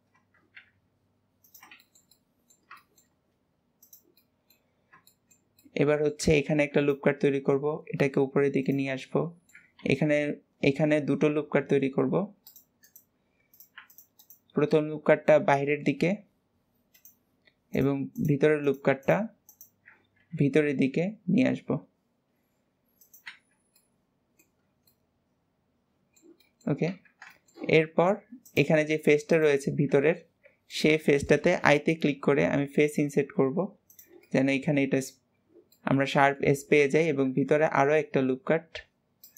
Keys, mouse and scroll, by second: 1.7-3.1 shift+middle drag, 3.1-3.8 scroll up 2, 3.8 click, 4.2 middle click, 4.7-5.1 scroll down 2, 5.1-6.5 shift+middle drag, 6.5 ctrl+r, 8.9 middle click, 9.8 ctrl+r, 13.5 click, 13.9 alt+shift+click, 14.2 alt+shift+click, 14.7 middle click, 15.3 g, 17.8 click, 18.2 alt+shift+click, 18.7 click, 19.6 alt+shift+click, 20.2 g, 23.6 scroll down 2, 23.8-24.7 middle drag, 24.9-27.0 middle drag, 27.0 Tab, 27.4-28.5 shift+middle drag, 28.5 click, 29.0 alt+z, 29.4 click, 29.9 alt+z, 30.2-32.4 middle drag, 34.3-35.3 middle drag, 35.3-35.8 scroll up 2, 35.8-37.3 middle drag, 37.3 ctrl+r.